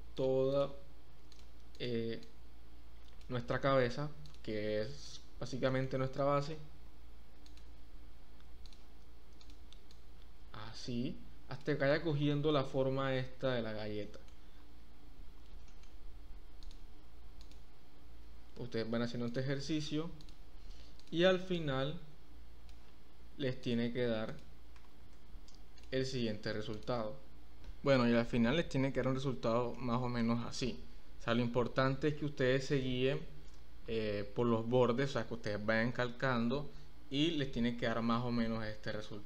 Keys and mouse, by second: 0.5 click, 1.7 click, 2.2-3.2 drag, 4.2 click, 5.6 shift+click, 6.5 e, 6.8 z, 7.5 click, 8.8 click, 10.0-11.7 drag, 12.4 shift+middle click, 14.0 shift+middle click, 15.7 shift+middle click, 16.6 middle click, 18.3 e, 18.5 z, 21.5-22.7 drag, 23.6 click, 24.7 e, 25.1 z, 26.8 click, 29.8 shift+middle click, 32.8 shift+middle click, 37.3 shift+middle click, 39.0 shift+middle click.